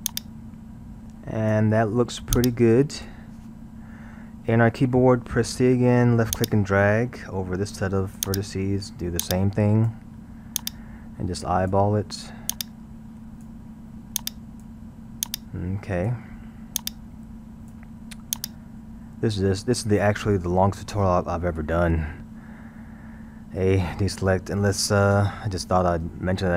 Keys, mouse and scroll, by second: 4.5 a, 5.5 c, 9.3 click, 23.1 a, 23.7 Tab.